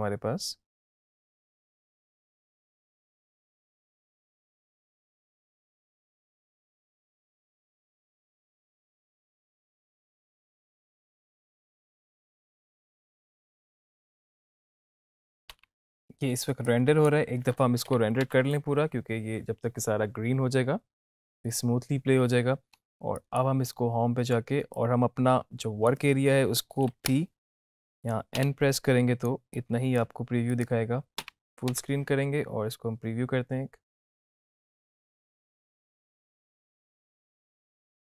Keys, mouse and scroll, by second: 0.0 space, 15.3 space, 16.6 space, 16.8-17.4 drag, 18.1 Home, 18.4 space, 22.8 space, 23.4-26.1 drag, 27.2 ctrl+Left, 28.6 n, 29.6-30.3 drag, 31.8 space.